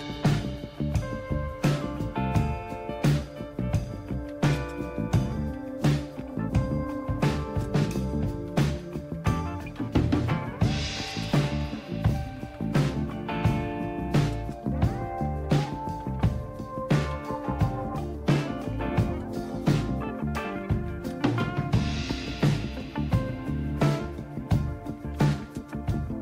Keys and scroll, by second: 2.5 typing, 4.3-13.1 typing, 14.4 typing, 16.0-17.8 typing, 19.0 Return, 20.5-21.2 typing, 24.8-26.2 typing.